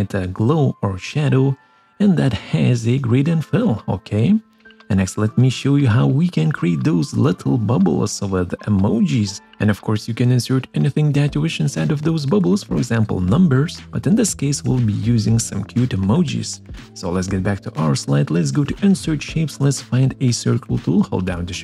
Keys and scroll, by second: 3.5 ctrl+z, 14.8 ctrl+z.